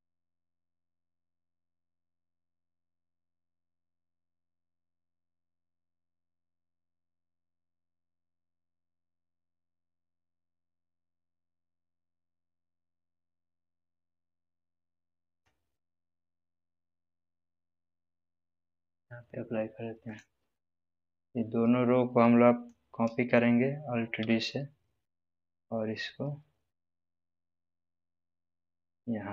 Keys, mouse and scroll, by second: 7.8 g, 7.8 click, 11.3 g, 18.1 g, 18.2-22.8 drag, 24.1 alt+d, 28.3 click.